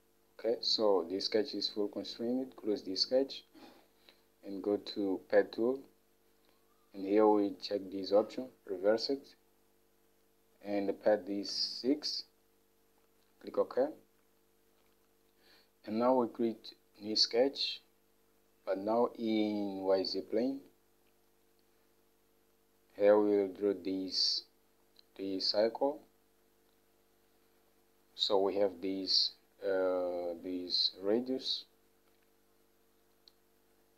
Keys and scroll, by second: 2.5-3.3 typing, 12.1 6.